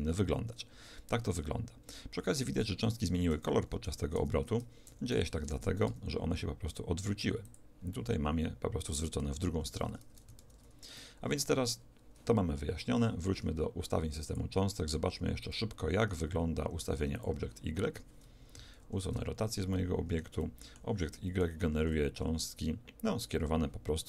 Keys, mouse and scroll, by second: 3.4 r, 5.4 Escape, 5.4 alt+a, 5.9 r, 8.0-9.6 middle drag, 9.6 Escape, 10.4 ctrl+z, 11.0-14.2 middle drag, 14.2-17.4 drag, 18.8 alt+r, 19.8-23.0 middle drag, 21.8 alt+a.